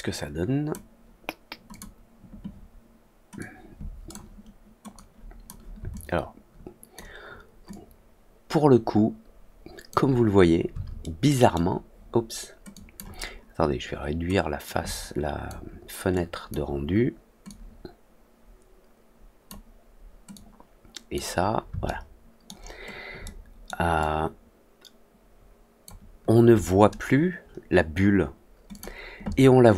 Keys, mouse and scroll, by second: 1.6 click, 3.3-4.0 drag, 4.9-5.4 drag, 5.9-6.9 alt+drag, 7.6-9.8 alt+drag, 11.0-11.5 middle drag, 12.7 drag, 14.6 click, 16.1 click, 17.4-19.4 drag, 20.2 click, 21.8-22.4 alt+middle drag, 23.2-23.6 alt+middle drag, 23.9-25.8 alt+drag, 28.6 click.